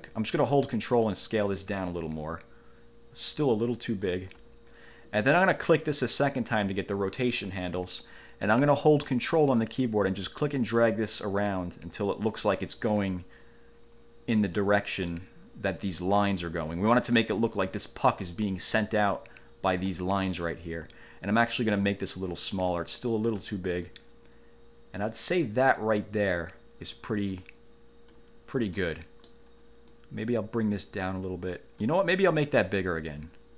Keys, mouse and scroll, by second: 1.1-4.7 ctrl+drag, 6.3 click, 10.5-12.7 ctrl+drag, 14.7-16.1 drag, 21.5-23.7 ctrl+drag, 24.1-27.3 drag, 27.5 click, 28.9 middle click, 30.1-32.2 drag, 32.7-33.5 ctrl+drag.